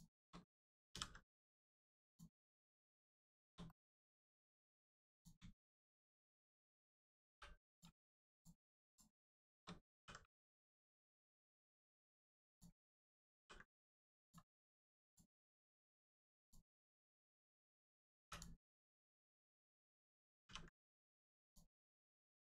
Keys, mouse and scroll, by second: 2.0 click, 2.5 middle click, 3.2 shift+middle click, 3.6 middle click, 3.7 middle click, 5.1 click, 5.4 shift+click, 5.8 shift+middle click, 6.4-7.2 scroll down 1, 7.2 3, 7.6 click, 8.2 click, 8.8 shift+click, 9.4 shift+middle click, 9.9 ctrl+e, 11.2 click, 12.2 2, 12.4 click, 14.2 click, 14.5 middle click, 15.0 click, 15.3 middle click, 16.4 click, 16.8 shift+middle click, 17.1 middle click, 18.2 3, 18.2 click, 21.4 click, 21.8 middle click.